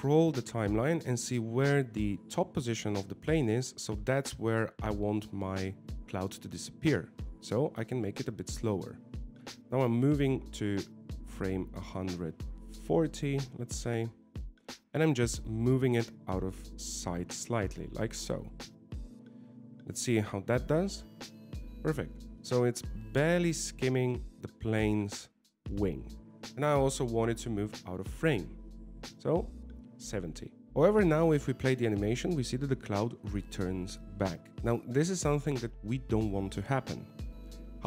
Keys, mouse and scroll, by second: 1.0 click, 16.5 g, 18.9 middle click, 21.1 click, 26.4 shift+middle click, 26.4 click, 30.7 ctrl+z, 31.3 click, 32.7 click.